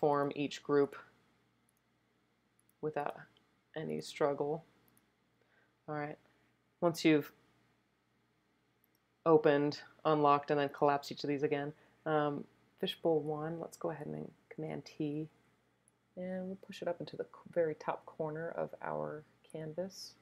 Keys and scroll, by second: 14.6 super+t.